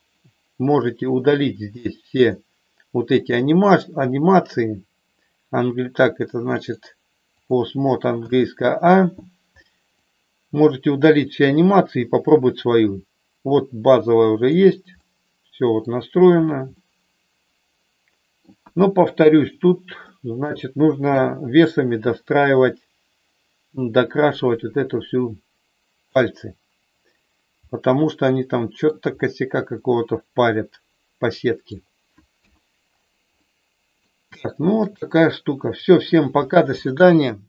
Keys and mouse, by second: 6.7-7.7 drag, 8.2 a, 10.1-14.7 drag, 15.1 middle click, 16.7-18.4 middle drag, 18.5 KP_1, 20.1 middle click, 21.1 KP_3, 23.9-26.2 drag, 27.5-28.9 middle drag, 29.7-31.7 middle drag, 32.3 KP_1, 33.3 middle click, 34.3 shift+middle click, 35.5 middle click.